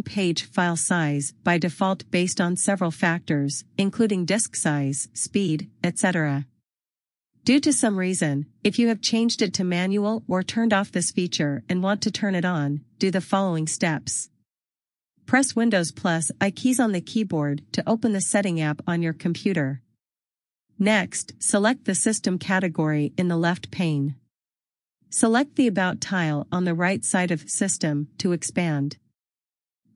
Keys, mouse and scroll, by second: 14.1 click, 16.6 super+i, 24.5-25.6 scroll, 27.2 click.